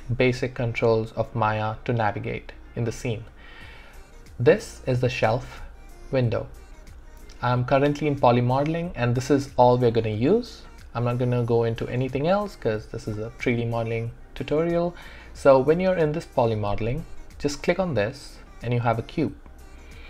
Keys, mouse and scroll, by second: 17.6 click.